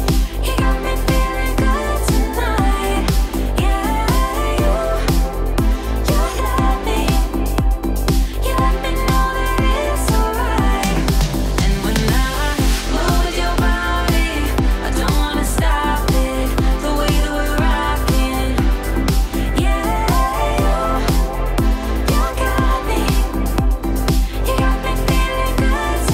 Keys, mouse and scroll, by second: 0.6-2.4 drag, 8.1-9.4 alt+drag, 11.1 middle click, 11.7-12.3 scroll down 1, 12.3-14.0 middle click, 12.9 click, 16.4 scroll down 1, 17.5 click, 18.2 scroll up 1, 18.7-19.4 middle drag, 20.7 click, 21.2 ctrl+d, 23.4 click.